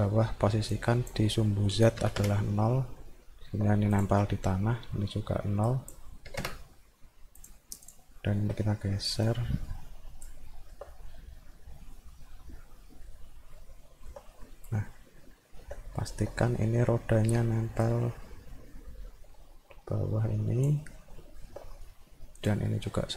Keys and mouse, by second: 0.7 click, 3.0 alt+middle click, 4.0 click, 5.7 click, 7.9 click, 8.2 alt+middle click, 9.3-10.3 drag, 10.5 alt+middle click, 11.0 middle click, 12.9 middle click, 13.6 alt+middle click, 15.3 alt+middle click, 15.8 middle click, 16.5 alt+middle click, 17.8-20.6 drag, 21.1 alt+middle click, 21.7 middle click, 22.4 click, 22.7 middle click.